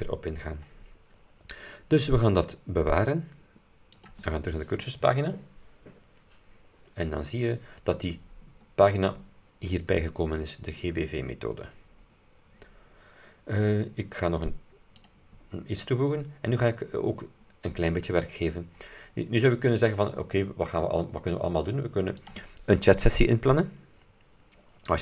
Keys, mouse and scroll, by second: 4.1 click, 8.8-9.2 scroll up 2, 13.6 scroll up 2, 15.0 click, 16.7-17.1 scroll down 2, 17.4-17.8 scroll up 2, 22.3 click.